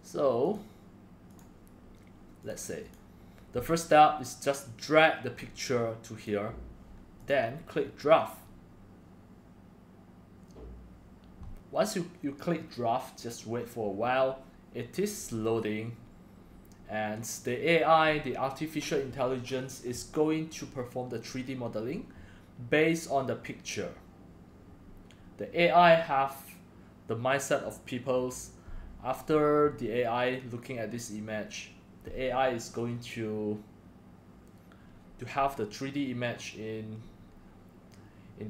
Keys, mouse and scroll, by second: 0.4 click, 0.6 click, 1.2 click, 2.9 click, 3.7-4.8 drag.